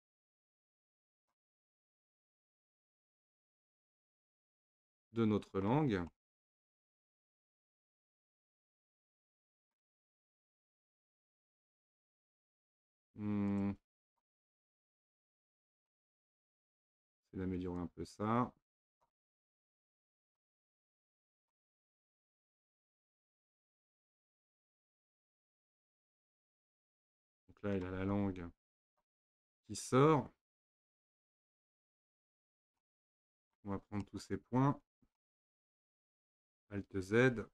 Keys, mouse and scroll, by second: 0.0 shift+click, 0.6 click, 2.3 click, 3.3-9.1 middle drag, 10.5-13.5 middle drag, 13.5 click, 14.1 shift+click, 14.8 click, 16.2-17.8 middle drag, 17.8 click, 20.3 click, 20.8 click, 22.8 click, 24.0 click, 24.7 click, 25.7-29.7 middle drag, 29.7-30.0 scroll up 1, 31.5-33.6 middle drag, 33.6-34.1 scroll up 1, 34.1-37.4 middle drag, 37.4 alt+z.